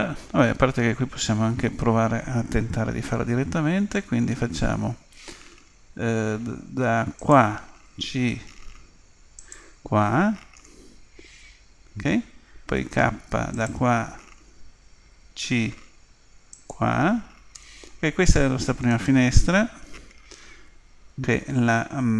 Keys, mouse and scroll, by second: 3.0 k, 12.8 k, 18.9-20.6 right drag, 20.6 Delete.